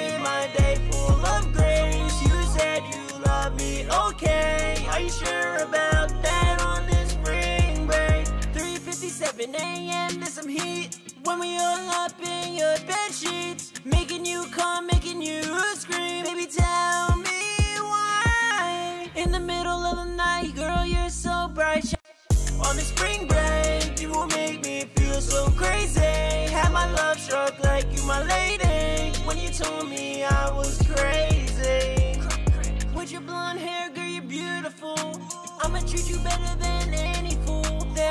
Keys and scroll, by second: 10.2-11.5 typing, 11.7 ctrl+super+w, 12.0 super+s, 18.4-19.5 typing, 21.0-21.9 typing, 35.1 ctrl+super+w, 35.4 super+s.